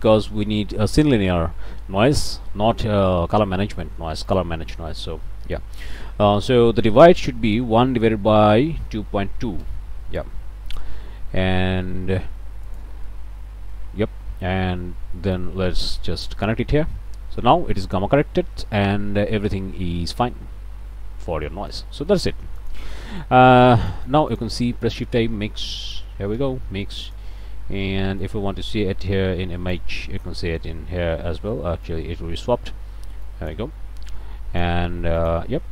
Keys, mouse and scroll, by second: 0.0 click, 4.3 click, 4.7 click, 7.7 1, 7.9 Tab, 8.9 KP_2, 9.1 KP_Decimal, 9.4 KP_2, 9.6 KP_Enter, 12.7 click, 13.1 click, 15.4-16.7 drag, 17.7-18.3 scroll up 1, 18.9 scroll up 1, 19.7-21.0 scroll down 2, 21.5 click, 22.1 click, 22.6 click, 23.1 click, 23.5 click, 23.9 click, 24.3 click, 24.7 shift+a, 25.7 m, 25.8 i, 25.9 x, 26.4 Return, 27.1 click, 28.2-30.0 drag, 31.9 click, 33.3 click, 34.2 click, 35.2 click.